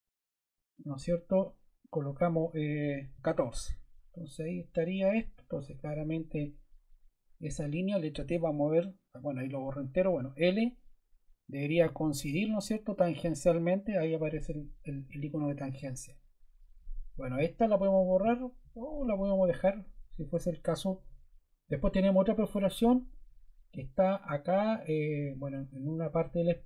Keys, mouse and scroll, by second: 2.8-3.3 typing, 6.2 click, 8.1 t, 10.0 l, 15.3 Escape.